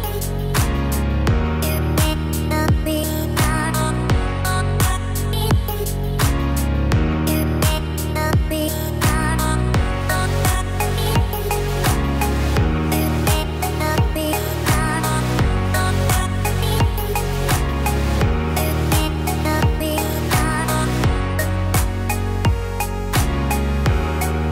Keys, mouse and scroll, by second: 4.0 scroll up 2, 5.2 click, 5.6 click, 6.6 click, 8.2 ctrl+b, 11.5 click, 12.3 Tab, 12.7-13.3 scroll down 3, 13.1 middle click, 13.7 middle click, 14.4 middle click, 15.6 click, 15.9 Tab, 16.4-17.2 scroll up 1, 17.2 click, 17.4 click, 18.4 e, 20.4 e.